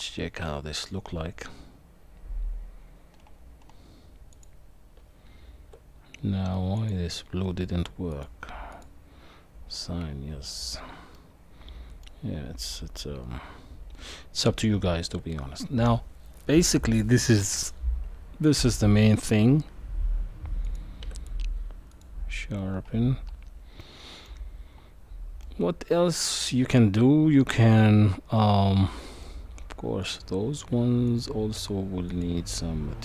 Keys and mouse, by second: 4.3 click, 5.0 Tab, 6.8 click, 8.1 click, 8.7 click, 9.7 middle click, 11.1 middle click, 14.4 Tab, 20.6 click, 21.0 q, 27.4-29.2 middle drag, 30.0 click, 31.1 shift+click, 32.1-33.0 drag.